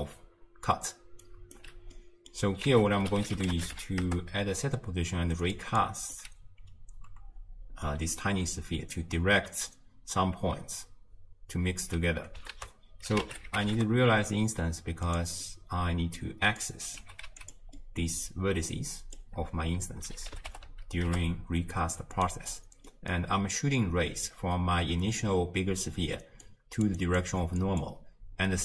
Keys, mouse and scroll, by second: 1.3 right click, 1.5 d, 4.0 ctrl+a, 16.6 click, 18.7-19.2 drag, 26.4-28.6 drag.